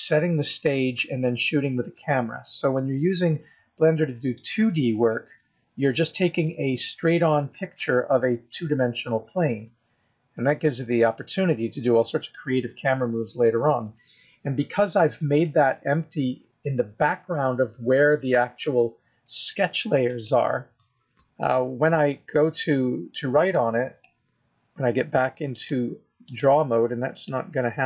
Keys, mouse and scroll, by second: 0.0-0.4 scroll down 3, 0.4 middle click, 3.7-4.4 scroll up 1, 4.4 scroll down 1, 4.5 scroll down 2, 5.0 middle click, 7.9-8.8 scroll up 4, 9.0-9.6 scroll down 5, 9.5 middle click, 12.3 scroll up 1, 13.5 KP_0, 20.0 click, 22.1 scroll up 3, 23.5 click, 25.5 click, 27.2 click.